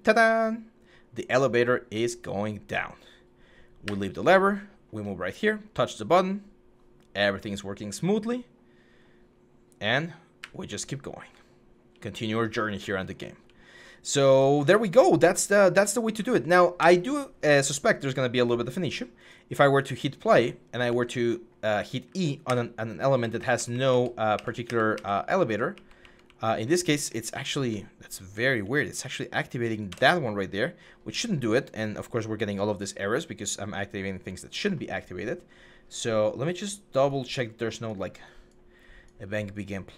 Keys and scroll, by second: 3.6-4.6 w, 6.8 w, 10.2-15.9 typing, 16.6 Escape, 20.6-29.9 typing, 29.6 Escape.